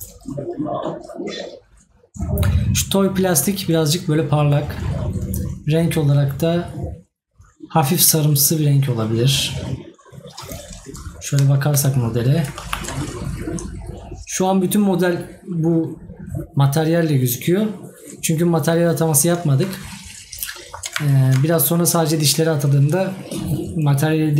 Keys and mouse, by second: 11.5 right click, 20.5 right click.